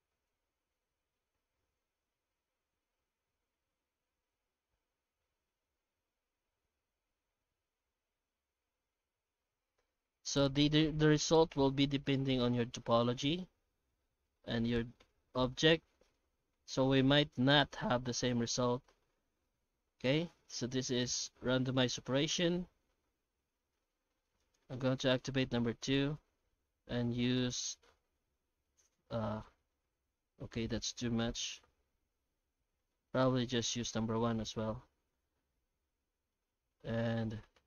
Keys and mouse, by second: 16.1-19.1 middle drag, 19.4 F9.